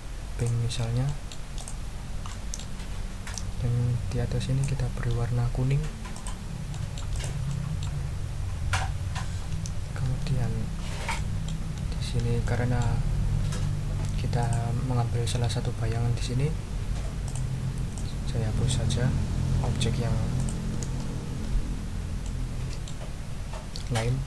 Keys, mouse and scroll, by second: 0.3 click, 1.0 click, 1.6 ctrl+click, 2.0-2.3 ctrl+scroll down 2, 2.3 ctrl+click, 3.3-4.8 drag, 6.1 click, 6.7 click, 7.5 click, 10.6-11.0 ctrl+scroll up 2, 11.1 ctrl+click, 11.9 ctrl+scroll down 2, 12.4 ctrl+click, 14.4 click, 17.2 click, 17.9 click, 19.7 Delete, 20.3 click, 20.7 Delete, 22.2 middle click.